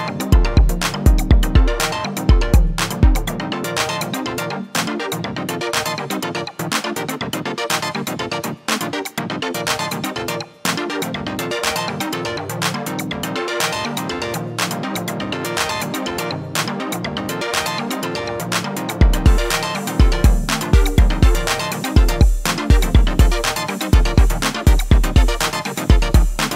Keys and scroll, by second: 10.5 ctrl+r.